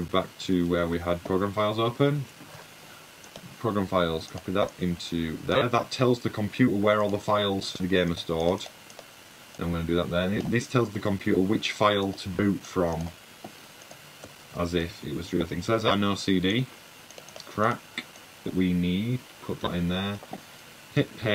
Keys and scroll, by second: 1.5-2.5 typing, 3.8 super+c, 6.9 super+v, 11.8 super+v, 15.8 super+a, 16.1 super+c.